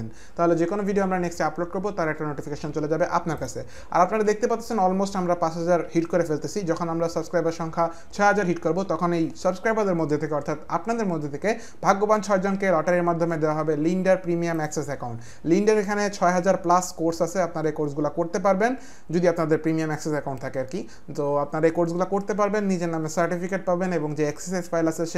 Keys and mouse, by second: 3.3 click.